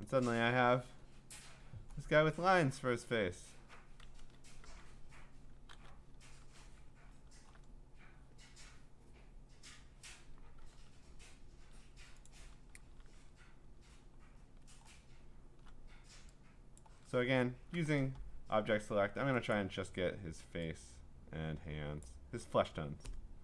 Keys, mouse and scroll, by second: 2.2-3.7 scroll, 4.6 ctrl+a, 5.7 ctrl+c, 6.4 ctrl+Tab, 6.4 scroll up 3, 7.4 scroll up 1, 9.5 middle click, 9.7 middle click, 9.8 middle click, 10.6 ctrl+Tab, 11.2 scroll, 11.5 middle click, 12.3 click, 13.1 ctrl+v, 14.1-15.3 scroll, 15.9 scroll down 9, 16.8 click, 17.3 scroll down 2, 18.6 scroll, 19.5 click, 22.0 click.